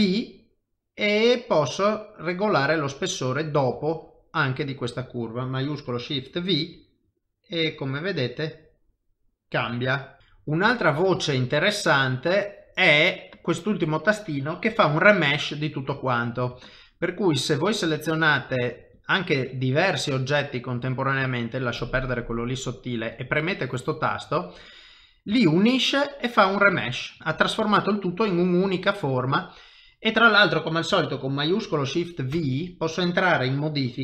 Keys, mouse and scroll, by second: 3.2 middle click, 3.8 shift+middle click, 10.3 middle click, 10.8 shift+middle click, 11.2 ctrl+middle click, 16.0 click, 16.6-19.0 shift+click, 19.6 middle click, 21.8 middle click, 23.5 click, 24.7 middle click, 25.4 ctrl+middle click, 26.5 middle click, 28.6 ctrl+middle click, 29.2 middle click, 32.3 ctrl+shift+v.